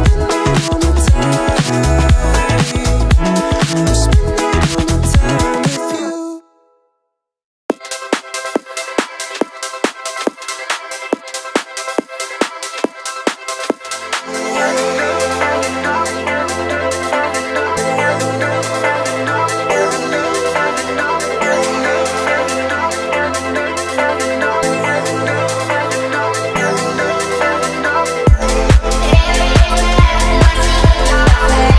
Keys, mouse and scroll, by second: 0.2 space, 1.8 click, 3.9-4.7 drag, 6.6-7.1 shift+drag, 9.6 alt+d, 13.3-15.3 drag, 17.0-18.8 drag, 24.7 alt+d, 25.4 click, 26.7-28.3 drag, 28.6-31.7 drag.